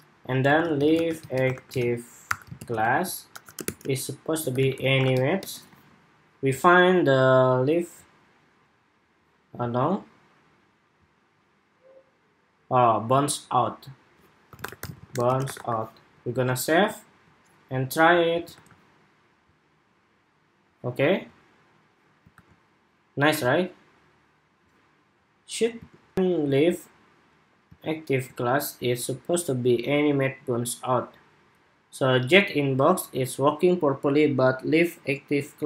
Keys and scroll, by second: 5.4 super+Tab, 12.9 super+Tab, 16.0 super+s, 16.5 super+Tab, 18.2 super+r, 22.0 super+r, 25.8 shift+super+2.